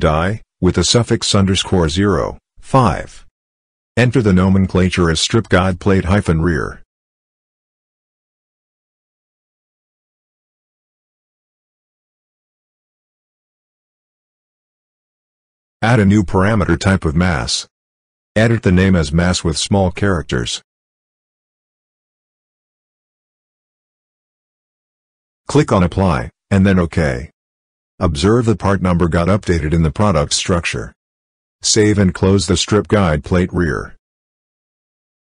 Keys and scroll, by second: 1.8 5, 4.1-6.1 typing, 7.3-11.6 typing, 13.1 r, 20.2-21.7 typing, 31.3 ctrl+s.